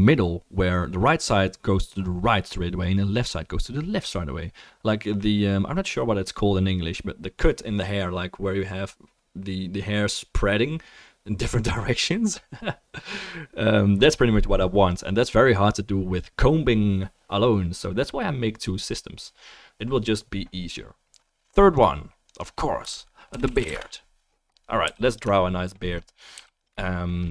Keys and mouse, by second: 20.1-21.8 right drag, 24.8 f, 25.4 right click, 25.7 click, 25.7 middle click, 26.1-27.3 right drag, 26.3 f, 26.8-27.3 shift+middle drag.